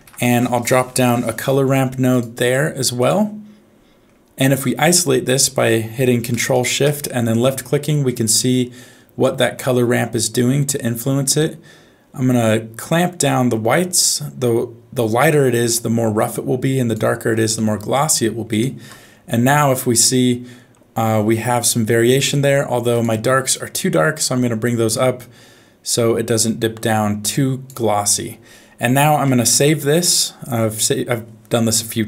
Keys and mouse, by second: 8.0-9.5 middle drag, 10.9-17.0 drag, 17.6 middle click, 18.5 ctrl+shift+click, 19.5-20.8 middle drag, 22.9 click, 23.5 click, 28.5 middle click, 29.5 ctrl+shift+s.